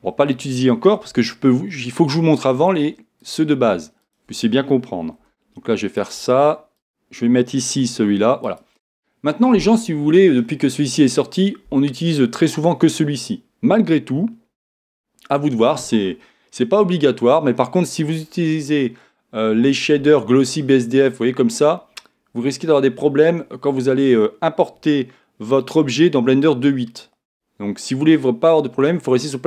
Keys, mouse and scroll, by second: 3.2-5.9 drag, 5.2 g, 6.8-10.5 drag, 7.7 g, 10.5 middle click, 17.6-29.4 middle drag.